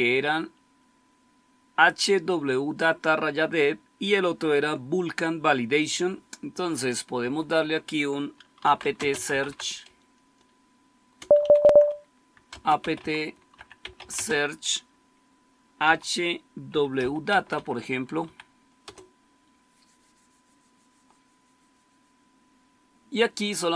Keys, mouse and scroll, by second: 0.0 Up, 6.5 Down, 7.2 Down, 8.3-14.4 typing, 15.8-19.3 typing.